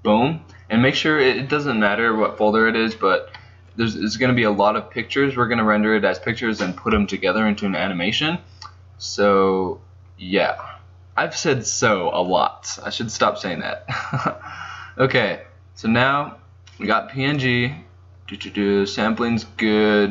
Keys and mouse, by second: 8.6-17.0 middle drag, 17.0-20.1 drag.